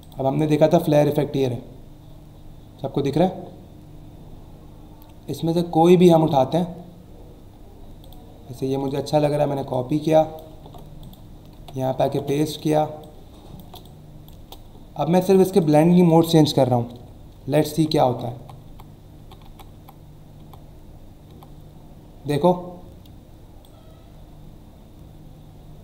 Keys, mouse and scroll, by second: 0.0 click, 1.1 scroll up 1, 3.0 scroll down 1, 4.0 scroll up 1, 4.4 scroll down 1, 5.4 scroll down 1, 6.3 scroll up 1, 7.5 scroll up 1, 8.0 click, 8.8 right click, 9.7 click, 10.6 alt+Tab, 11.2 click, 11.6 ctrl+v, 13.0 alt+shift+click, 14.4 Return, 15.3 click, 23.6 click.